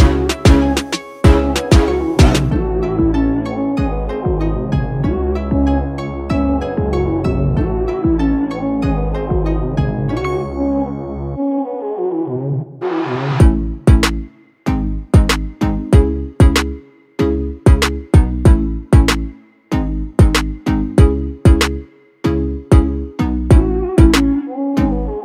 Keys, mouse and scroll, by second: 1.7 click, 4.1-10.0 typing, 11.3 Return, 12.9 click, 14.5 right click, 16.3-19.7 drag.